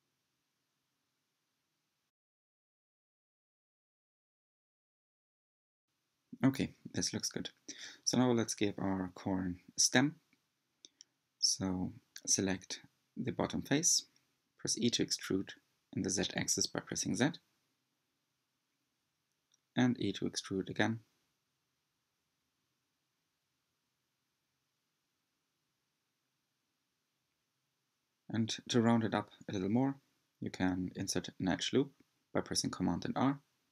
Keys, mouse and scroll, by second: 2.5-5.5 shift+middle drag, 7.1-7.7 scroll down 1, 7.7-8.3 scroll down 1, 8.3-9.0 scroll up 1, 9.0-9.8 scroll up 1, 9.8 scroll up 1, 10.0-11.7 shift+middle drag, 11.7-12.2 scroll up 2, 12.2-13.5 shift+middle drag, 13.5 3, 14.4 click, 14.9-16.4 middle drag, 16.4 e, 19.9 e, 22.9 s, 28.7 click, 29.7 scroll up 4, 30.1 shift+middle click, 31.0-31.5 scroll up 3, 32.4 g.